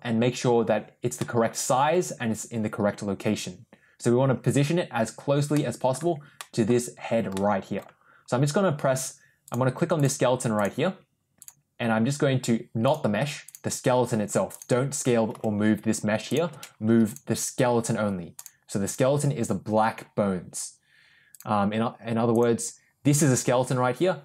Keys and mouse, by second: 1.1-1.8 middle drag, 5.4-5.8 middle drag, 6.3 middle drag, 7.2-7.7 middle drag, 11.3 click, 13.3 click, 15.2 g, 17.0 click, 21.2 click, 22.2 click.